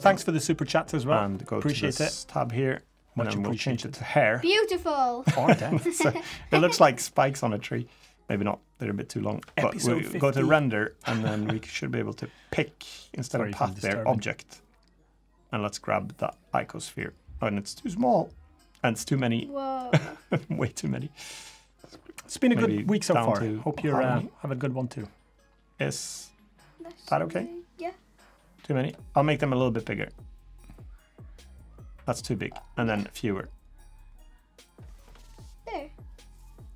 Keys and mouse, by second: 1.8 click, 3.1 click, 9.7 click, 12.8-13.6 drag, 15.3 click, 17.7-19.5 drag, 21.0-28.7 drag, 30.3-32.0 drag, 33.4-36.7 drag.